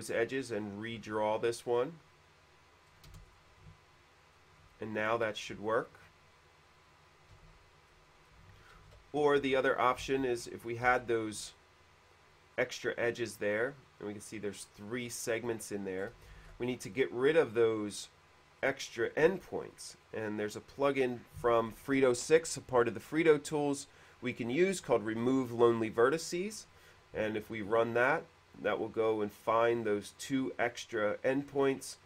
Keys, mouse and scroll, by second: 1.2 q, 1.9 click, 3.0 click, 3.3 space, 6.2 alt+click, 7.6 alt+g, 8.2 middle click, 8.9 ctrl+z, 9.7 ctrl+z, 10.1 alt+g, 10.1 ctrl+z, 10.3 alt+g, 10.3 ctrl+z, 11.0 ctrl+z, 15.6 middle click, 16.2-16.5 scroll up 2, 16.4 middle click, 16.6 alt+g, 18.8 middle click, 19.9 click, 20.1 click, 30.0 click.